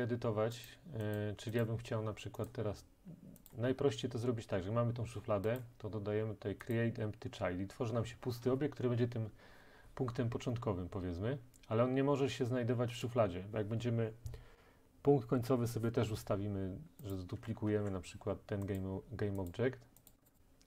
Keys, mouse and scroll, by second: 1.2 click, 1.7 click, 2.5 right click, 3.5 click, 5.6 right click, 17.1 click, 17.7 ctrl+d, 18.8 click, 19.5 click, 20.1 click, 20.3 click, 20.4 click.